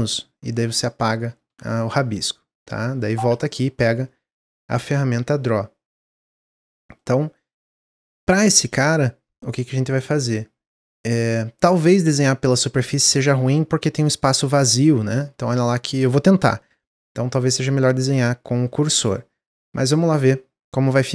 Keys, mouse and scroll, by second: 1.4 n, 3.2 click, 6.9-11.4 middle drag.